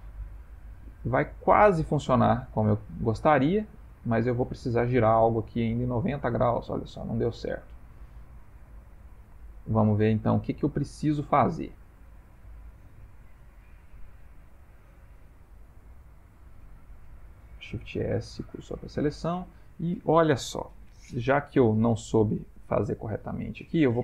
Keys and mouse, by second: 0.3 middle click, 0.4 middle click, 1.2 middle click, 1.4-1.8 shift+middle click, 2.6 click, 4.0 middle click, 8.4 middle click, 8.5 middle click, 9.1 g, 10.2 ctrl+middle click, 10.8 ctrl+middle click, 11.0 shift+middle click, 11.2 shift+middle click, 12.2 Tab, 14.2 click, 15.1 shift+a, 17.9 shift+s, 19.3 Tab, 21.4 middle click, 22.9 Tab.